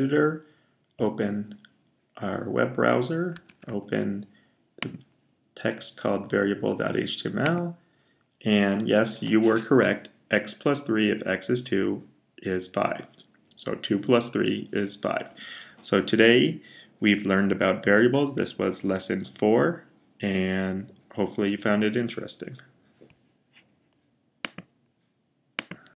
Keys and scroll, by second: 3.3 super+o.